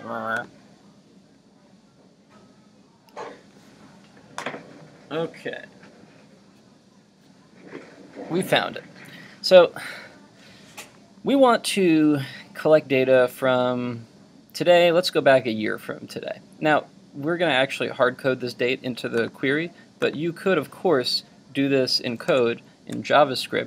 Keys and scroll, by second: 22.3 super+Tab.